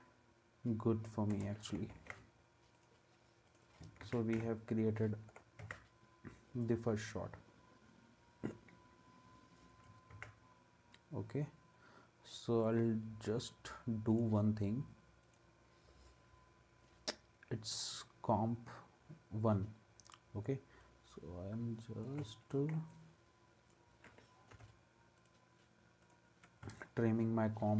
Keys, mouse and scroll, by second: 1.3 space, 1.9 ctrl+a, 4.0 ctrl+s, 5.6 ctrl+s, 10.1 ctrl+s, 24.5 n.